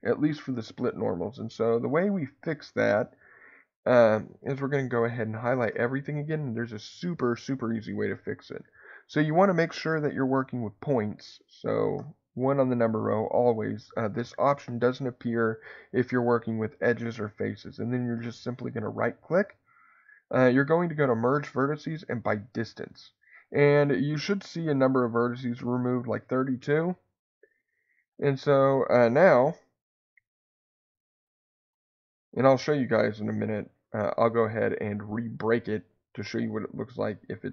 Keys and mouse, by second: 5.7 a, 28.0 click, 31.1 click.